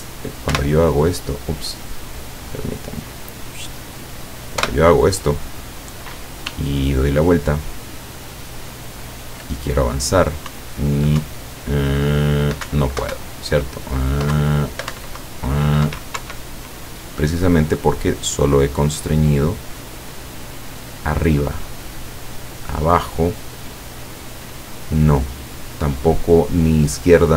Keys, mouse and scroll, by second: 0.6 p, 3.1 click, 4.7 p, 6.6 w, 10.6 Up, 12.7 Down, 13.2 Up, 14.4 Down, 15.0 Up, 16.2 Escape, 18.7-19.6 drag, 20.5-22.9 drag, 26.1-27.3 drag.